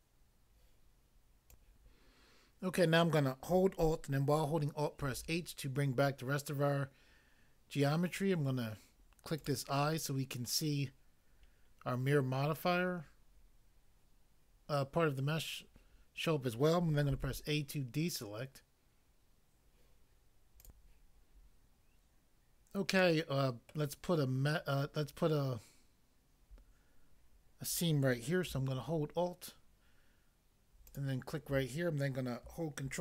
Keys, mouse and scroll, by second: 1.4 click, 5.0 alt+h, 9.4 click, 17.2 a, 20.6 click, 23.0 middle click, 23.7 middle click, 30.9 alt+click, 31.0 alt+click.